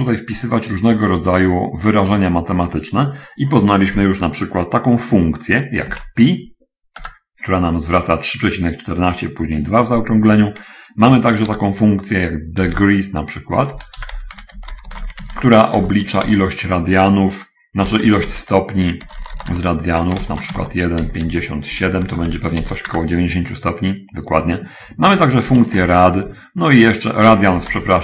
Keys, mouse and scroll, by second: 1.0 middle click, 1.0 scroll up 1, 5.9 p, 11.9 Return, 13.1 d, 14.4-16.6 typing, 18.1 9, 18.1 0, 18.7 0, 19.4 BackSpace, 20.6-23.0 typing, 23.3 Return, 25.4 Return, 25.6 r, 26.0 a, 26.2 d, 27.8-28.0 typing.